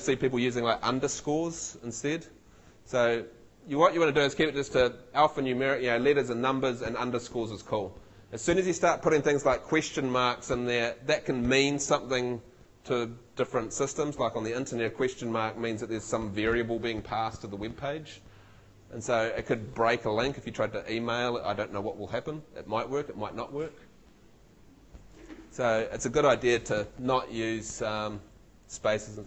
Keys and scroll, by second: 27.6 Left.